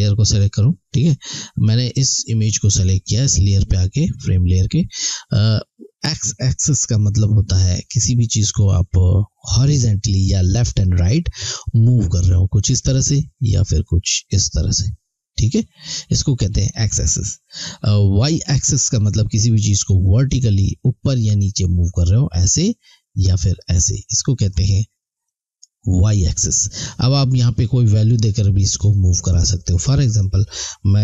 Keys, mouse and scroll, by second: 12.0 click, 21.7 click, 29.9 click.